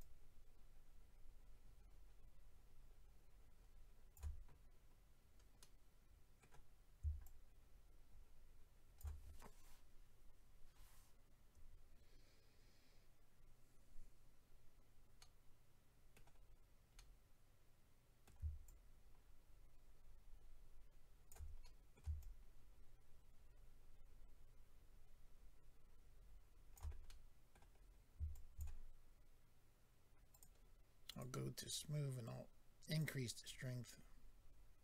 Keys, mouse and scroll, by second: 0.0 shift+click, 4.8-5.9 scroll down 4, 6.4 middle click, 6.7-7.2 scroll up 3, 7.2 shift+click, 9.2-10.2 scroll down 3, 10.3-11.6 scroll up 4, 15.2 middle click, 16.3-17.0 scroll down 2, 17.0 middle click, 17.0-17.4 scroll down 1, 18.6 shift+click, 21.6 middle click, 22.2 shift+click, 27.0 middle click, 27.8 scroll up 1, 28.3 shift+click, 28.3-28.6 scroll up 1, 30.3 click, 30.4 click, 31.1 click, 31.2 click, 32.2 click, 33.4 click.